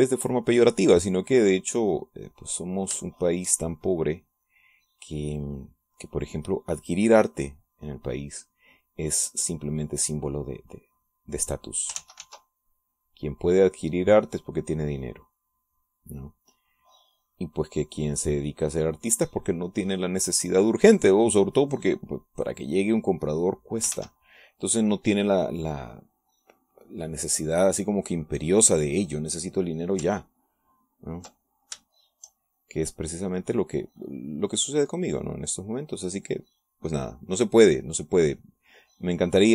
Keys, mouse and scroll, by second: 1.9-4.8 drag, 4.8-6.7 shift+drag, 6.8 click, 7.6-9.9 drag, 10.3-13.1 drag, 13.2 ctrl+z, 13.7-15.9 ctrl+drag, 16.2-25.0 drag, 25.1 ctrl+s, 27.2 click, 27.9 click, 28.5 click, 31.8 ctrl+click, 33.0 shift+click, 33.7-39.5 shift+drag.